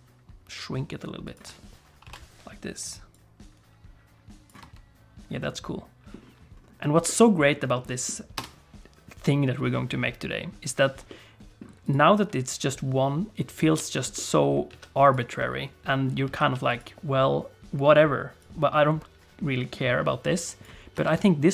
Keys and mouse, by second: 2.0 i, 3.1-4.5 drag, 4.6 space, 5.4 middle click, 7.1 click, 7.7 click, 8.4 space, 11.1 click, 11.2 middle click, 11.3 click, 11.4 middle click, 14.1 middle click, 14.7 alt+a, 15.0 click, 15.4 middle click, 16.4 alt+a, 16.7 click, 18.4-20.7 drag, 20.9 space.